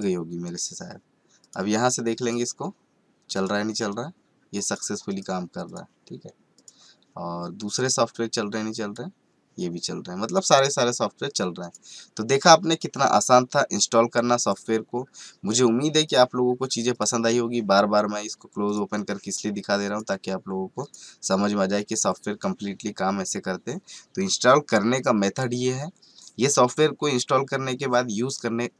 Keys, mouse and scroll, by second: 16.0 click, 16.1 click, 17.0 click.